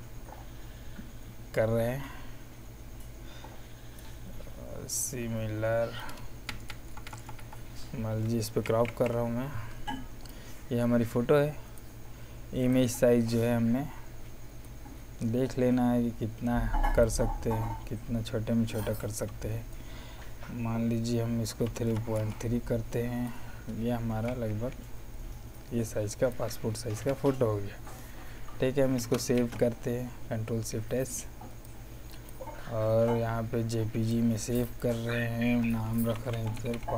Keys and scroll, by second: 6.4 Down, 8.6 alt+i, 8.8 alt+p, 21.6 KP_3, 21.8 KP_Decimal, 22.1 KP_3, 24.1 z, 26.9 v, 29.3 shift+s, 35.8-36.7 typing.